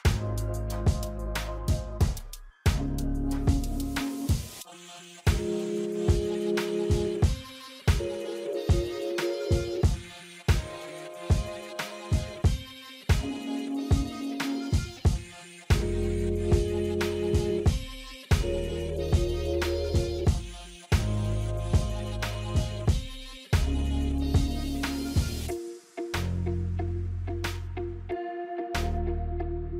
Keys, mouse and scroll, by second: 2.8 alt+scroll up 1, 3.1 click, 3.5 space, 3.7 alt+scroll up 1, 4.1 space, 4.1 click, 4.4 space, 5.1-11.4 drag, 11.4 alt+scroll down 1, 12.6 click, 12.8 alt+scroll down 1, 14.8 click, 15.3 scroll down 1, 15.7 scroll up 1, 18.5 scroll down 1, 19.4 click, 22.1-27.6 drag, 29.4 F9.